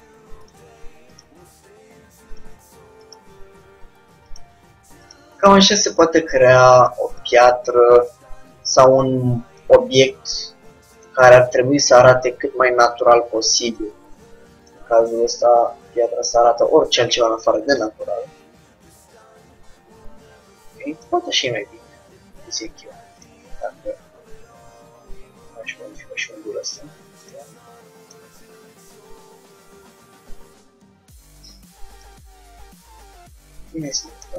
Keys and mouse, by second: 1.2-2.8 drag, 1.4 g, 3.1-4.8 drag, 3.3 g, 5.2-6.8 drag, 5.3 g, 7.3-10.4 drag, 7.4 g, 8.9 g, 11.0-12.7 drag, 11.2 g, 13.0-14.7 drag, 13.2 g, 16.3 click, 21.5-23.3 middle drag, 23.3-24.8 drag, 23.9 g, 28.2-29.7 drag, 29.2 g, 32.8 Tab.